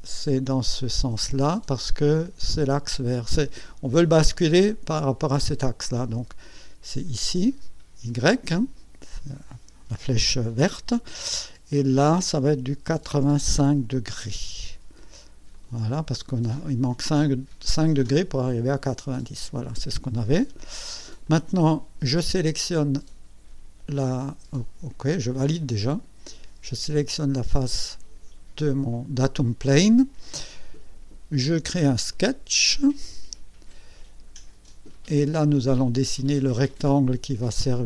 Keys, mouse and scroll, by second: 1.4 click, 7.2-8.5 drag, 13.2 KP_8, 14.0 KP_5, 15.5 click, 16.3-18.0 drag, 18.1-20.7 drag, 21.2 click, 24.0 click, 25.2 click, 27.3 click, 32.1 click, 33.5 scroll up 2, 33.9 right click, 36.2 click.